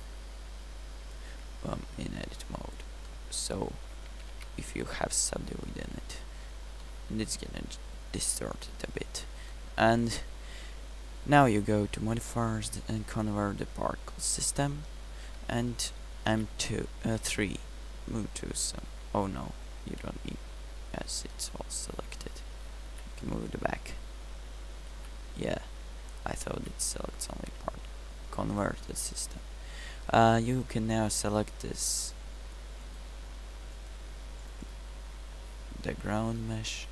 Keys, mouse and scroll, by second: 3.7 middle click, 5.2 Tab, 16.5 m, 20.8 3, 23.4 m, 27.1 m, 28.7 1.